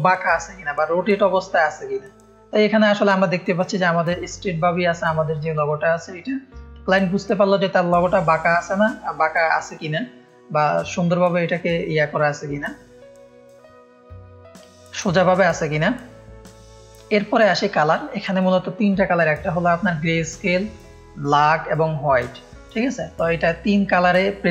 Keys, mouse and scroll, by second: 14.2 F1, 16.1 middle click, 16.3 scroll down 2.